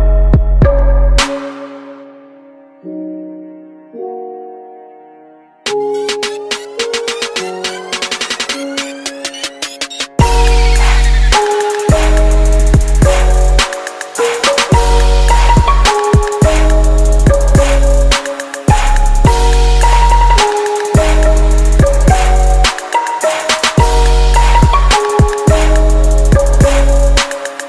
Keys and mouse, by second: 8.7-14.5 drag, 14.8-17.9 drag, 17.9 ctrl+c, 21.6-23.4 drag, 23.8-25.7 drag, 25.4-26.9 middle drag, 26.9-27.6 drag.